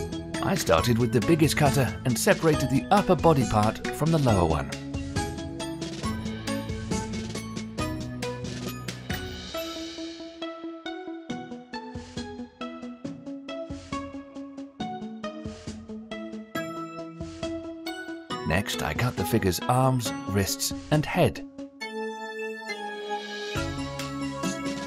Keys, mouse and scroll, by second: 1.1 KP_1, 2.1-3.3 shift+middle drag, 3.3 click, 3.9 scroll up 1, 4.3 shift+middle click, 4.7 scroll up 1, 5.0 g, 6.3-7.5 middle drag, 7.5 KP_Decimal, 8.4 scroll up 2, 8.7-9.5 middle drag, 9.5 g, 10.4-10.7 scroll up 4, 10.7-11.6 middle drag, 11.6 r, 12.0 g, 12.9-14.6 middle drag, 14.6-15.2 scroll down 1, 15.2-16.2 middle drag, 16.2 h, 16.9-17.3 middle drag, 17.3-17.8 scroll down 2, 17.8 click, 18.8 shift+d, 20.5 KP_7, 21.6 g, 23.3-24.8 typing.